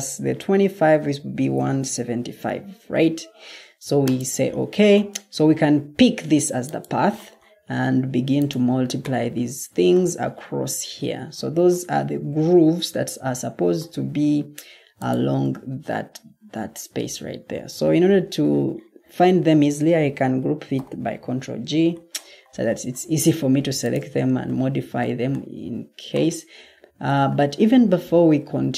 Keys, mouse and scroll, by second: 1.5-2.1 typing, 20.7 ctrl+g.